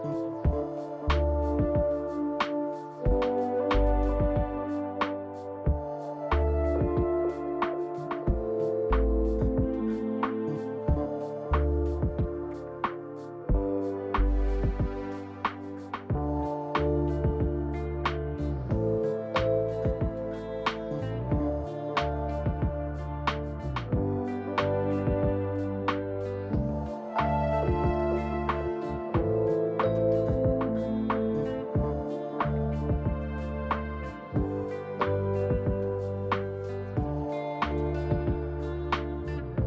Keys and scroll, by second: 1.9 space, 1.9 g, 3.0-3.8 typing, 5.4-6.3 typing, 7.6-8.4 typing, 13.8-14.6 typing, 15.5 Delete, 16.0 ctrl+d, 16.1 ctrl+z, 16.4 ctrl+d, 24.1-24.9 typing, 34.7 ctrl+d, 35.6-37.7 typing, 39.2 Delete.